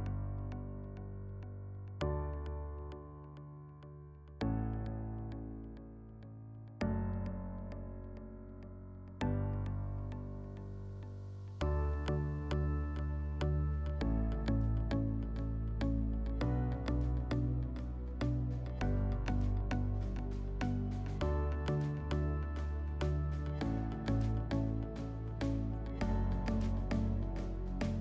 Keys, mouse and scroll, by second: 2.5 click, 3.9 click, 6.0 click, 6.8 click, 8.2 click, 9.7 click, 11.6 click, 12.4 click, 14.8 click, 15.8-16.9 drag, 19.4 click, 19.6-21.6 middle drag, 23.7 click, 26.2 click, 27.7 click.